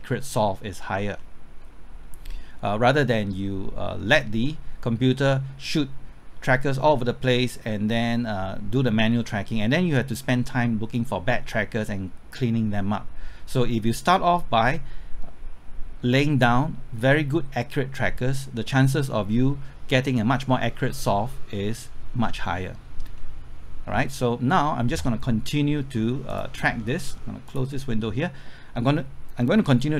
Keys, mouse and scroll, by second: 26.3-29.9 drag.